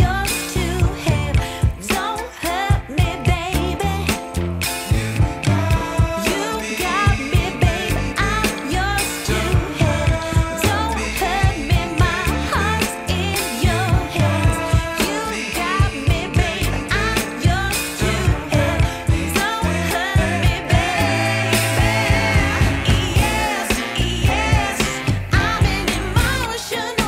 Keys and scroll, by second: 2.3 Delete, 2.8 alt+q, 3.8 z, 12.9 w, 16.6 F4, 26.9 w.